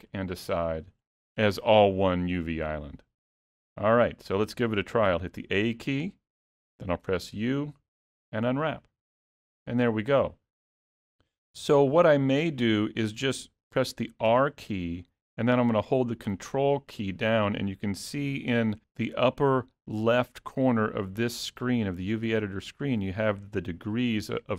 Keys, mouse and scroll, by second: 2.0 scroll up 1, 3.1 middle click, 4.3-5.2 scroll down 1, 5.2-5.6 scroll down 1, 5.2 a, 8.8 u, 14.4 r.